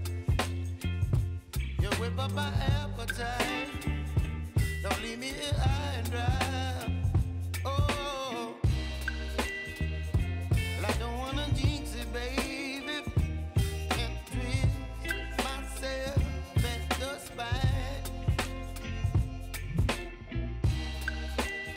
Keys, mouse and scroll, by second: 0.5 p, 1.2 click, 1.6 space, 3.9-8.5 drag, 8.5 click, 9.5 F9, 10.3-13.5 drag, 14.0 space, 16.1 space, 16.9-18.4 drag, 20.2 ctrl+c, 21.0 click, 21.6 u.